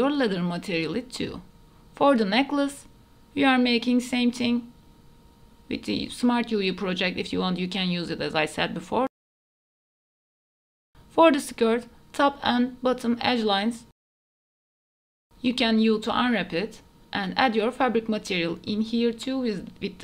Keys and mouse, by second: 0.0 Tab, 0.4 middle click, 1.1 middle click, 1.5 KP_Divide, 1.7 middle click, 2.1 shift+middle click, 2.4 shift+middle click, 2.8 shift+middle click, 3.0 middle click, 3.4 shift+middle click, 4.3 middle click, 4.7 KP_Divide, 4.9 middle click, 5.2 Tab, 5.3 middle click, 5.6 a, 5.6 u, 6.1 middle click, 6.3 Tab, 6.5 middle click, 6.9 middle click, 7.2 middle click, 7.7 middle click, 8.5 middle click, 9.2 ctrl+s, 9.8 KP_Divide, 10.0 middle click, 10.1 Tab, 10.2 middle click, 10.4 click, 10.5 middle click, 11.6 2, 12.1 middle click, 12.8 middle click, 14.4 alt+shift+click, 15.0 middle click, 15.6 middle click, 16.1 middle click, 16.3 a, 18.4 Tab, 18.5 middle click, 18.7 KP_Divide, 19.1 shift+middle click, 19.2 ctrl+s.